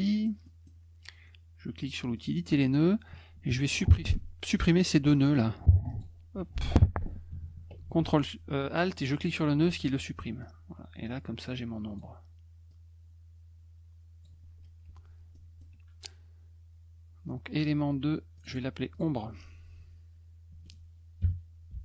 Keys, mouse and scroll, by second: 0.0 middle click, 0.4 middle click, 2.1 click, 5.9 click, 9.1 ctrl+alt+click, 10.4-12.0 drag, 12.7-14.2 drag, 14.8 F1, 15.3 middle drag, 18.3 click, 18.5 click, 18.9 click, 21.4-21.8 typing.